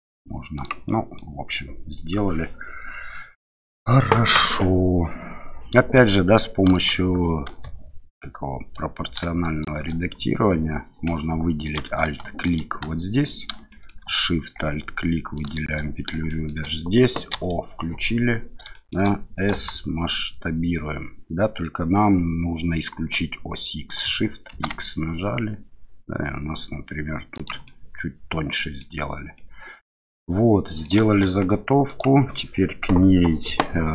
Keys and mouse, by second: 0.5 click, 0.8 middle click, 6.7 alt+click, 9.4 shift+click, 11.6 alt+click, 12.4 alt+click, 13.7 shift+middle click, 15.3 alt+shift+click, 16.2 shift+middle click, 17.3 o, 18.7 shift+click, 19.5 s, 24.5 shift+x, 27.3 click, 27.6-28.8 middle drag, 29.3 middle click, 30.1 middle click, 31.2 Tab, 31.9-33.9 drag.